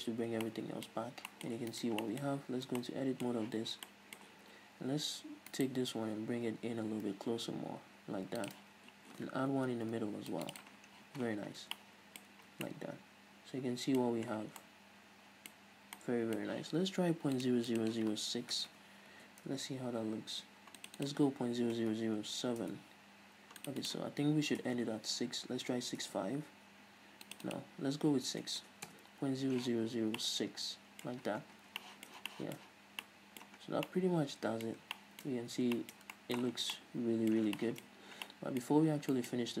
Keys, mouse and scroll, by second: 0.4 alt+h, 1.2-1.5 scroll up 2, 2.0 right click, 2.3-5.8 middle drag, 2.6 scroll up 2, 2.8 Tab, 3.7 z, 4.5 a, 5.8 alt+right click, 6.0-6.8 middle drag, 6.7 g, 8.7 shift+click, 8.9 scroll up 1, 9.8 ctrl+r, 10.8 click, 10.9 right click, 11.0-11.6 scroll down 2, 11.2 z, 11.9 Tab, 12.0-16.2 middle drag, 12.5 a, 12.7 scroll down 2, 14.3-14.9 scroll up 2, 15.8-16.2 scroll up 2, 17.6-30.4 drag, 19.0 BackSpace, 19.9 Return, 22.2 BackSpace, 23.0 Return, 25.0 BackSpace, 26.4 Return, 28.9 BackSpace, 29.2 Return, 30.2 scroll down 2, 30.4-39.6 middle drag, 31.5-32.1 scroll down 2, 33.8-34.2 scroll down 2, 34.9 scroll up 2, 35.6-36.0 scroll up 2, 36.8 scroll down 2, 38.2-38.5 scroll up 2.